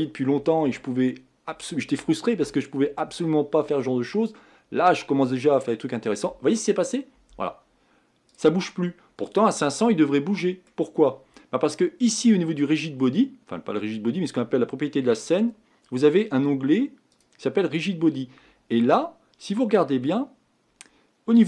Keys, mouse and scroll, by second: 8.3 click, 8.9-9.5 scroll down 3, 9.5-21.4 middle drag.